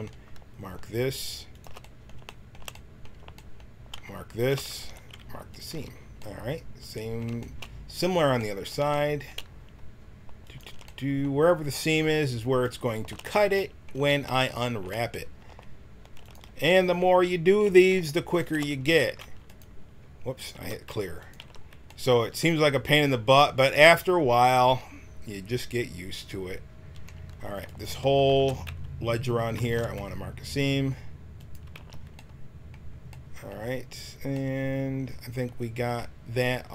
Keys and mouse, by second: 1.8 middle click, 2.4 click, 4.7 ctrl+e, 5.7 a, 5.9 click, 5.9 middle click, 10.9 right click, 11.2-12.9 middle drag, 13.2-14.8 middle drag, 16.2-18.8 middle drag, 18.8 ctrl+e, 20.5 ctrl+e, 21.3 a, 27.6 click, 28.3 ctrl+e, 29.6 ctrl+e, 31.7 a.